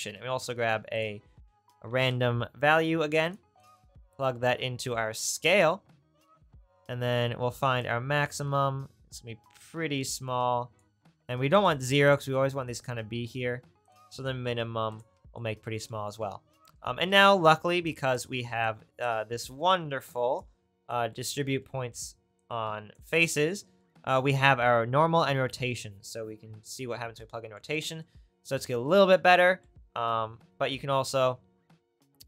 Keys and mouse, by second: 0.0 shift+a, 30.6 shift+a, 32.0 shift+a.